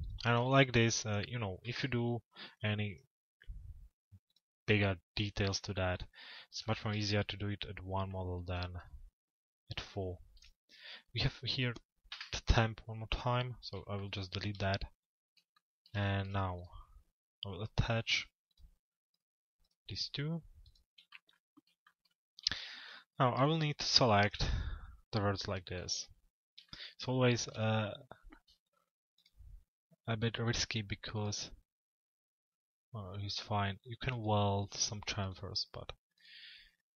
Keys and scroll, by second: 11.7 Delete.